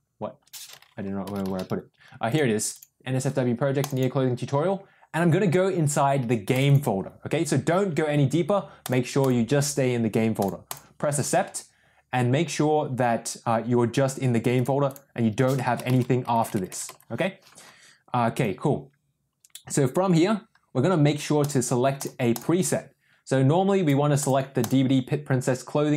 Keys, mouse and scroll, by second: 14.5-18.3 drag, 16.3 BackSpace, 22.3 click, 24.2 click, 24.6 click.